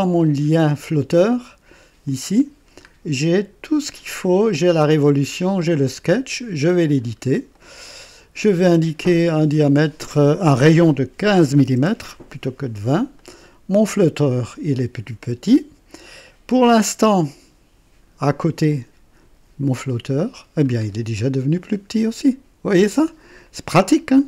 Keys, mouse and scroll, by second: 0.5 click, 1.1 click, 2.0 click, 2.5-2.9 scroll down 1, 4.3 click, 5.8 click, 7.1 scroll up 2, 7.5 right click, 9.2 click, 11.0 KP_1, 11.0 KP_1, 11.3 KP_5, 11.7 KP_Enter, 11.7 KP_Enter, 13.1 click, 18.6 click, 19.7-20.7 drag, 20.9 scroll down 1, 21.5-24.2 drag.